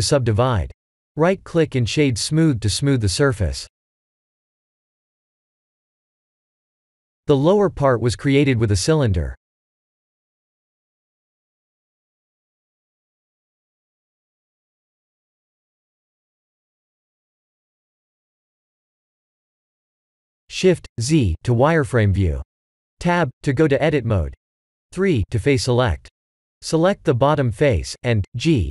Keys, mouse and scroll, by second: 0.4 click, 1.3 ctrl+3, 1.6 click, 2.1 right click, 4.0 click, 5.9 click, 6.8 click, 7.9 shift+a, 12.7 g, 15.3 s, 17.1 g, 19.2 s, 23.6 shift+z, 26.3 Tab, 26.7 3, 27.1 click, 27.9 g.